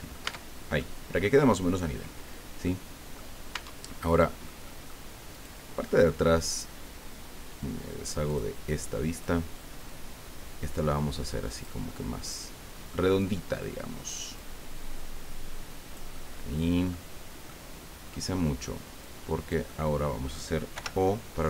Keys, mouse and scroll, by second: 0.2 middle click, 0.3 Tab, 0.8 click, 0.8 middle click, 2.6 middle click, 3.5 Tab, 4.0 right click, 4.1 middle click, 4.6 middle click, 5.3 right click, 5.7 middle click, 8.3 click, 9.1 right click, 9.8-11.8 drag, 11.9-13.0 middle drag, 14.4-17.1 drag, 17.4 middle click, 19.0-20.4 drag, 20.7 o.